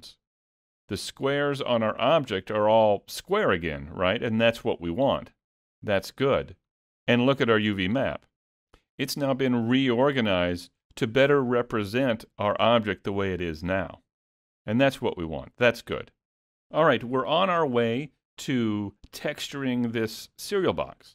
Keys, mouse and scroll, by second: 1.1 middle click, 4.8 middle click.